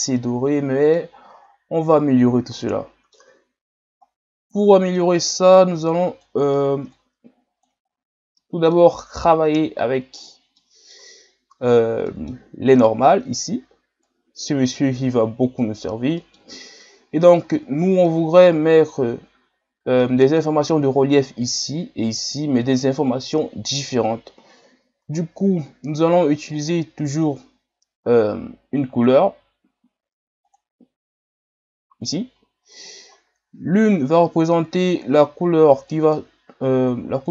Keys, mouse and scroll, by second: 1.3-2.6 scroll up 2, 2.6-3.6 middle drag, 3.6-4.0 scroll down 2, 5.9-15.4 drag, 17.6-18.2 middle drag, 18.2-19.2 scroll up 4, 20.1-37.3 middle drag.